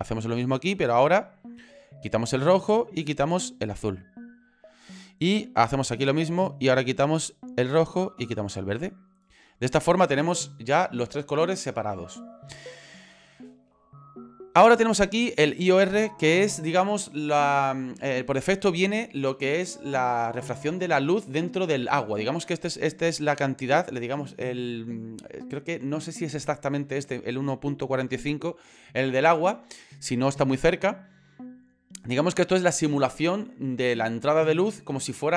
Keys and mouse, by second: 2.4 middle click, 3.2 middle click, 3.4 middle click, 5.6 click, 7.1 middle click, 7.2 middle click, 7.4 middle click.